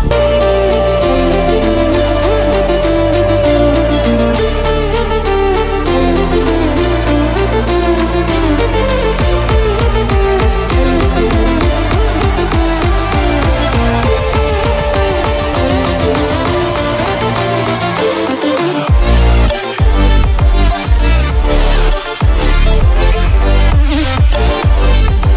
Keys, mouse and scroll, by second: 0.5 alt+shift+scroll down 1, 0.8 ctrl+scroll up 1, 1.9-3.3 drag, 3.3 click, 4.4 click, 5.6-5.9 alt+scroll up 1, 5.9 click, 7.7 shift+click, 9.1 shift+click, 10.4 shift+click, 10.7-11.2 alt+shift+scroll up 1, 11.6 shift+click, 12.0-12.5 shift+scroll down 2, 13.0 i, 13.2 click, 14.0-16.9 typing, 14.1 click, 15.8 click, 16.4 click, 17.0 click, 17.2 alt+shift+scroll down 1, 17.2-19.1 drag, 19.1 click, 20.8 click, 22.2 click, 22.6 v, 22.7 click, 23.6 click, 24.2 click, 24.5 v, 24.6 click.